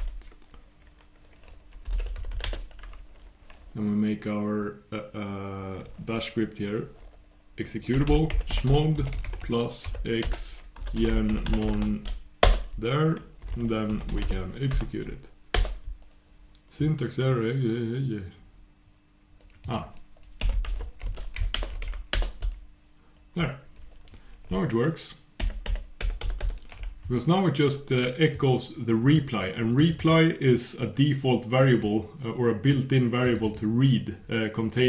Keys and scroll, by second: 21.7 shift+super+Return, 25.4 super+\, 26.0 super+'.